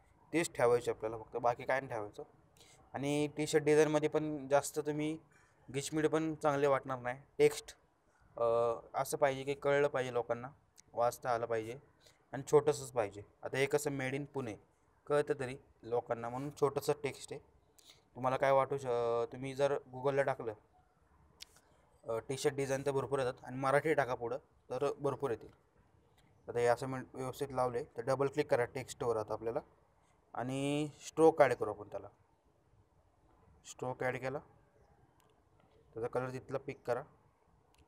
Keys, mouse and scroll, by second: 0.6 click, 10.2 click, 11.2 ctrl+t, 12.3-13.0 click, 13.7-15.6 drag, 23.0 shift+click, 25.7 shift+click, 31.7-34.0 shift+drag.